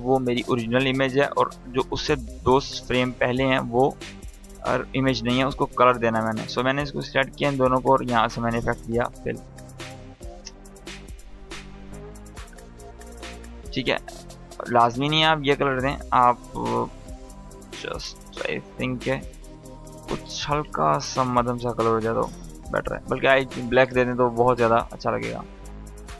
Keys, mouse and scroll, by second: 8.9 f, 10.1 Return, 11.7-15.2 drag, 24.9 space.